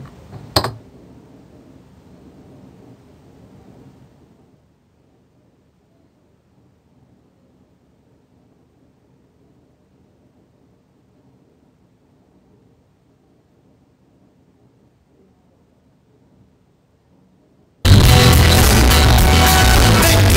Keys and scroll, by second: 1.0 Down.